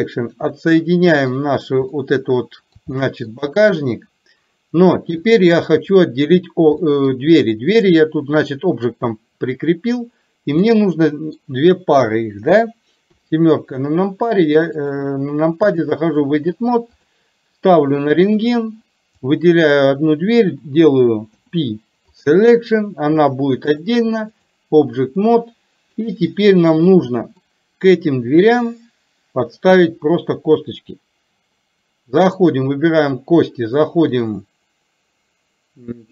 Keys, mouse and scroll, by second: 0.7 middle click, 1.9 middle click, 2.9 shift+middle click, 5.3 click, 6.8 middle click, 10.8-11.4 middle drag, 13.2 KP_7, 14.9-16.2 drag, 17.1 click, 19.3 click, 23.8 click, 25.3-26.1 middle drag, 27.4-27.8 middle drag, 32.3 click, 34.2-36.1 drag.